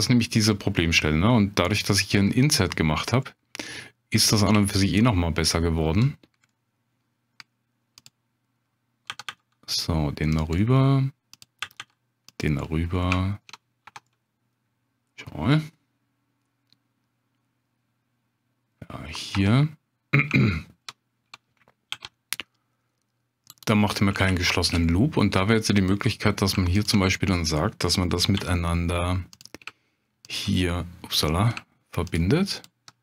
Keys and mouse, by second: 0.5 click, 1.9 click, 4.7-5.9 shift+drag, 6.5 middle click, 8.0 click, 9.1 g, 9.3 g, 10.3 click, 10.6 middle click, 11.3 click, 11.6 g, 11.8 g, 12.3 click, 14.9 Tab, 15.5-18.7 drag, 19.3 Tab, 20.4 shift+click, 21.9 ctrl+r, 24.2 shift+click, 24.9 middle click, 25.8 click, 27.1 click, 28.4 j, 30.3 shift+click.